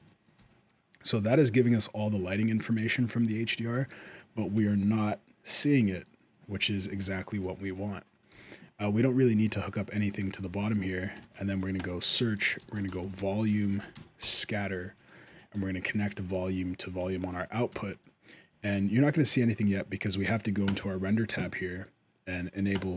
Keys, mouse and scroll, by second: 0.1 g, 2.4 middle click, 3.6 shift+middle click, 6.4 shift+middle click, 7.2 middle click, 7.9 click, 8.1 g, 10.1 click, 10.2 g, 10.7 shift+middle click, 11.0 shift+a, 13.7 Down, 15.8 ctrl+right click, 17.3 click, 17.5 g, 20.4 click, 22.6 click.